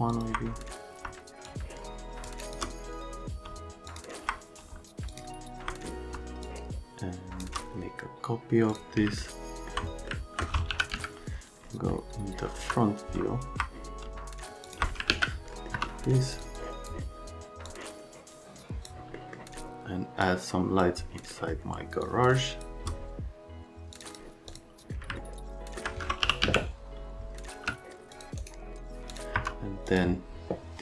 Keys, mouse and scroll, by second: 0.1 middle click, 1.4 shift+click, 3.8 click, 5.0 click, 6.4 click, 8.7 click, 9.1 alt+middle click, 10.0 alt+middle click, 10.7 f, 10.9 z, 12.5 F3, 14.6 click, 15.0 alt+q, 15.5 right click, 15.7 F3, 16.3 click, 16.5 click, 17.6 click, 19.1 right click, 20.2 click, 21.3 right click, 22.0 shift+click, 23.9 click, 24.0 click, 24.5 click, 25.2 alt+right click, 26.0-27.5 typing, 28.1 click, 28.4 right click, 29.1 click, 29.3 F3, 29.9 click.